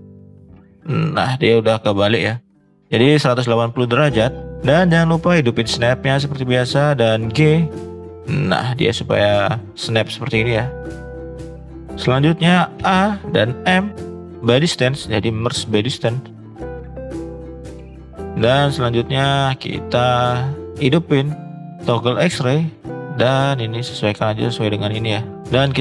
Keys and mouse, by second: 3.9-4.5 middle drag, 5.3 click, 7.4 g, 8.9-9.4 middle drag, 9.7-11.2 middle drag, 11.3 middle click, 11.4 middle drag, 11.8 middle click, 12.8 a, 13.6 m, 15.1 middle click, 15.6 click, 15.9 middle click, 16.5 middle click, 18.2 click, 19.1 shift+middle click, 20.5 click, 22.6 click, 23.1 click, 23.9-25.6 drag.